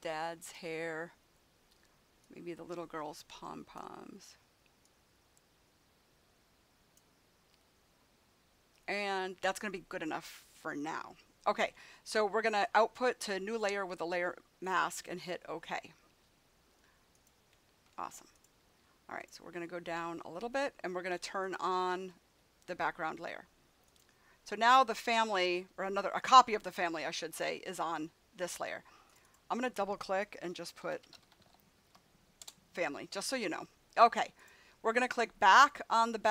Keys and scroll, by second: 30.5-32.3 typing, 32.3 Return.